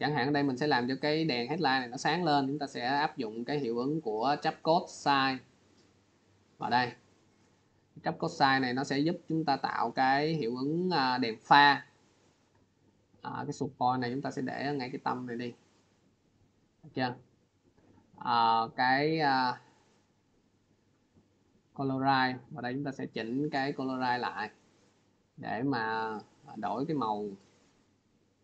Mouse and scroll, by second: 5.5 click, 11.0 click, 13.4 click, 14.9 click, 20.9 click, 24.0 click, 25.0 click, 26.2 click, 28.2 click.